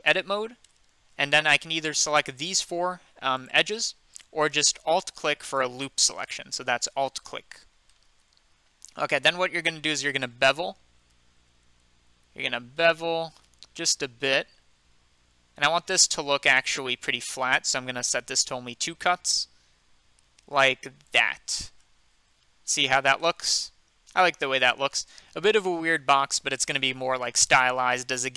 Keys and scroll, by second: 10.5 ctrl+b, 22.8 Tab.